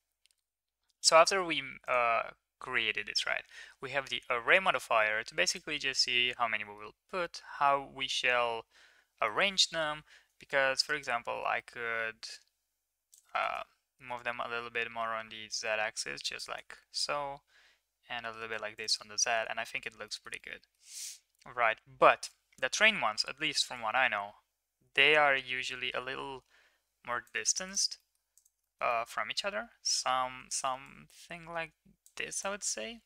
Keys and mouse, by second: 1.8 click, 5.4 click, 6.2-6.7 middle drag, 7.1-9.2 middle drag, 11.0-13.1 shift+drag, 13.3 ctrl+z, 14.2-16.3 drag, 16.9-18.5 shift+drag, 18.7 click, 18.9 middle drag, 19.3 ctrl+s, 19.6 middle click, 20.0 shift+middle drag, 20.3-20.7 middle drag, 23.7-27.3 shift+drag, 27.6 click, 27.9 middle click, 28.6 shift+middle drag, 28.8-29.8 middle drag, 30.8-32.1 shift+drag, 32.3 middle click, 32.6 ctrl+s.